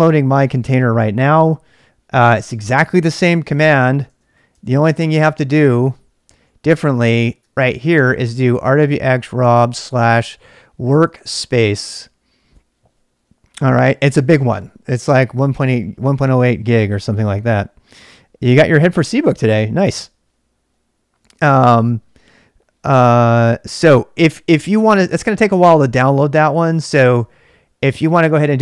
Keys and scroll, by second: 3.8 ctrl+c, 4.3-12.0 typing, 4.6 ctrl+k, 4.9 ctrl+[.